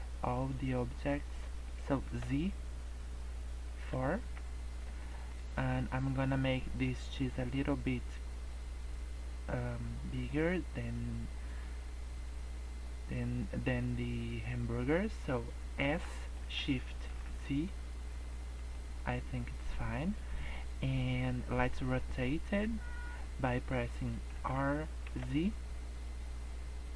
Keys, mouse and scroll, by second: 2.0 z, 4.5 scroll up 2, 5.0 shift+middle click, 15.8 s, 24.3 r.